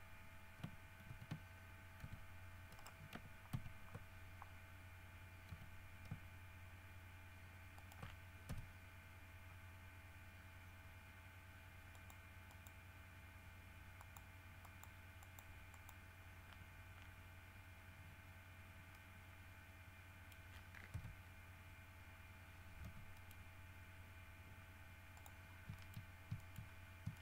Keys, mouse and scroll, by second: 1.3 alt+g, 2.2 r, 2.9 right click, 3.7 ctrl+z, 5.7 r, 7.9 ctrl+middle click, 8.6 ctrl+KP_3, 12.1 middle click, 12.7 middle click, 14.2 click, 14.8 click, 15.4 click, 15.9 click, 18.7 scroll down 1, 19.1-20.7 middle drag, 21.1 KP_3, 22.1 scroll up 2, 23.0 g, 23.3 middle click, 25.3 middle click, 25.6-27.2 scroll up 10, 25.9 shift+middle click, 26.5 shift+middle click.